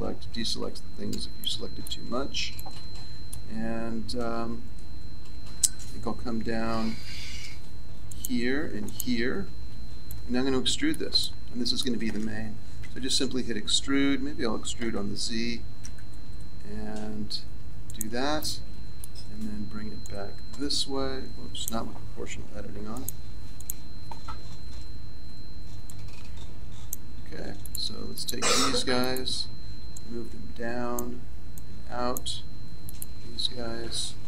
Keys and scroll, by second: 7.0 c, 12.7 e, 24.7 ctrl+z.